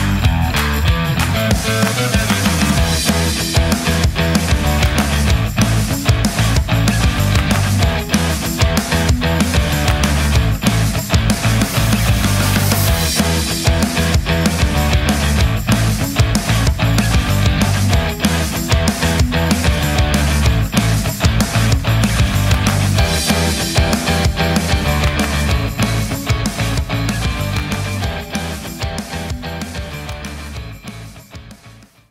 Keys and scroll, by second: 23.9 Delete.